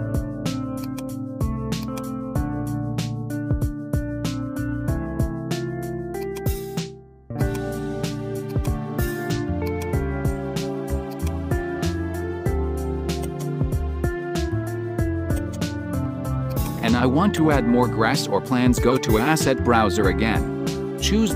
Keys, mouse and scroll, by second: 6.2-8.6 drag, 9.8-13.4 drag, 13.4 right click, 15.6 right click, 16.6 click, 17.6 right click, 18.8 click.